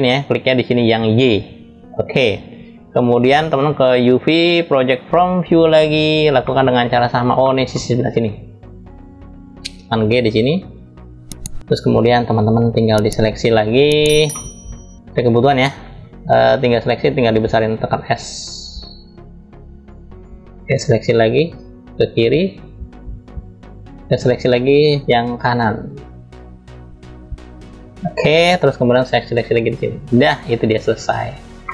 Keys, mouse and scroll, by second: 1.0 click, 2.1-3.4 scroll up 2, 3.4-4.8 drag, 6.1 middle click, 6.7-7.1 scroll down 1, 7.1 middle click, 7.7-8.3 drag, 9.2 g, 11.4-11.8 scroll up 2, 11.8-12.2 scroll down 1, 12.5-13.4 drag, 13.9 middle click, 16.2-16.9 drag, 17.2 s, 20.3-23.5 drag, 23.9-24.7 drag, 27.7-30.4 drag, 31.3 middle click.